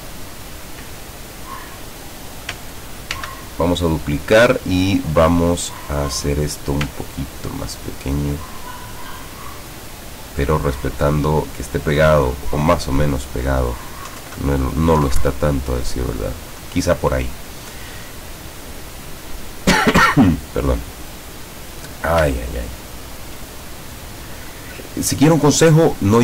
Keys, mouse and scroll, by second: 3.2 ctrl+d, 7.0 ctrl+click, 14.1 Down, 14.3 Left, 15.1 Down, 22.5-23.1 ctrl+scroll up 4, 24.3-25.4 scroll up 6, 26.1 scroll up 2.